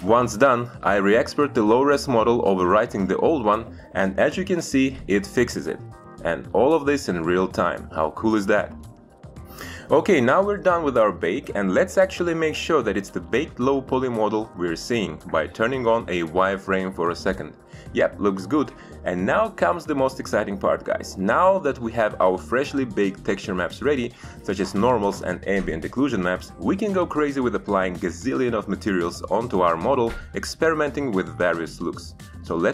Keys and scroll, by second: 5.4 alt+Tab.